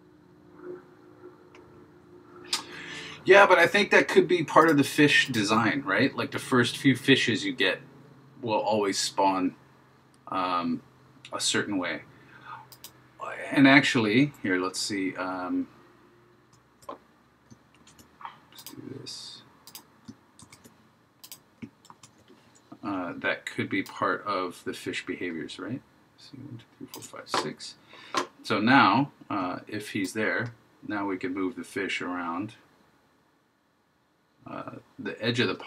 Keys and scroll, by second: 16.5 super+v, 17.8 super+z, 20.5 super+c, 21.9 super+v.